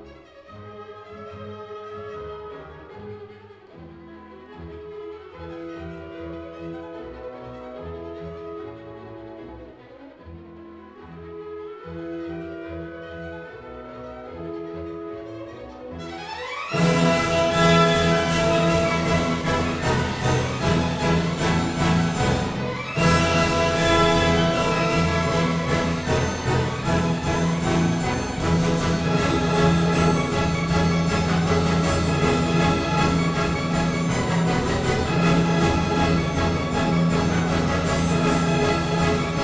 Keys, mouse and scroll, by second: 0.1 click, 1.3 click, 4.4 Escape, 5.2 click, 6.5 click, 7.5 click, 8.3 click, 8.8 click, 9.4 s, 10.3 click, 11.5 click, 12.1 click, 13.1 typing, 13.5 Return, 14.8 s, 15.6 click, 16.6 click, 18.3 click, 20.0 click, 21.3 click, 22.7 click, 23.9 click, 24.5 Escape, 26.4 click, 27.7 click, 29.0 click, 30.9 click, 31.4 s, 33.6 click, 34.5 click, 35.5-35.9 typing, 36.1 Return, 37.3 Escape, 37.5 s, 38.7 click.